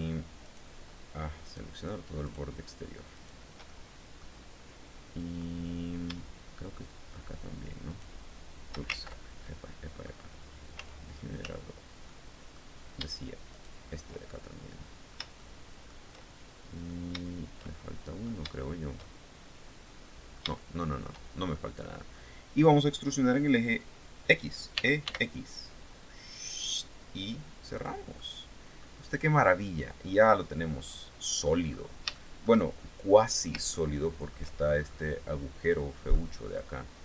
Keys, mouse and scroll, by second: 0.0 shift+right click, 1.0 shift+right click, 1.8 shift+right click, 2.7 shift+right click, 3.2 shift+middle click, 7.4 shift+right click, 8.5 ctrl+shift+z, 9.0 ctrl+shift+middle click, 10.3 z, 11.6 middle click, 13.1 shift+right click, 13.9 shift+middle click, 14.9 shift+middle click, 15.7 shift+middle click, 17.2 shift+middle click, 18.6-20.7 shift+middle drag, 20.8 shift+scroll down 1, 21.1 shift+middle click, 24.3 e, 24.6 x, 27.3 click, 27.7 middle click, 28.6 scroll down 2, 29.0-31.2 middle drag, 31.7-33.1 shift+middle drag, 33.3 shift+middle click, 34.3-34.7 shift+scroll up 3, 35.7 middle click.